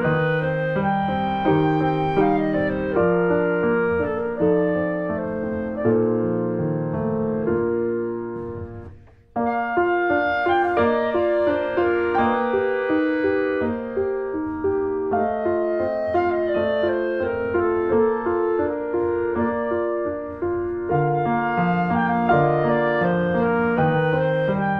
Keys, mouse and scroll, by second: 0.9-2.0 middle drag, 2.0 click, 2.9 Tab, 3.0 click, 3.1 middle click, 3.5 Tab, 3.7 middle click, 4.0 click, 4.2 middle click, 4.5 click, 4.9 middle click, 5.4 ctrl+z, 5.6 middle click, 5.9 r, 7.1 click, 7.7-9.3 middle drag, 9.3 click, 10.4 middle click, 10.6 r, 12.1 middle click, 12.5 Tab, 12.6 scroll down 1, 12.7 middle click, 13.3 click, 13.4 Tab, 13.5 middle click, 14.5 Tab, 14.7 click, 14.9 Tab, 15.5 click, 15.6 Tab, 15.8 Tab, 16.0 click, 16.6 Tab, 17.2 alt+middle click, 17.8 scroll down 1, 18.0 shift+middle click, 18.2 r, 21.3 click, 22.8 alt+middle click, 23.1 scroll up 1, 23.8 r.